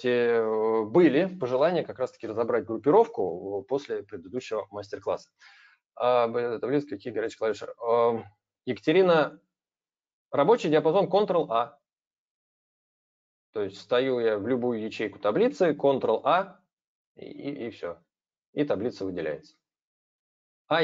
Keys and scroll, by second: 16.0 ctrl+a.